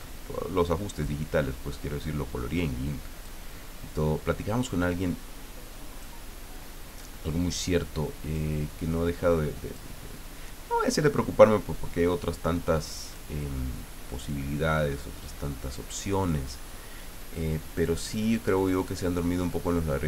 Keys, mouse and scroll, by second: 1.0-3.4 drag, 4.0-6.2 drag, 6.6-8.5 drag, 8.7-9.9 drag, 11.7-13.3 drag, 14.2-16.1 drag, 17.7-19.1 drag.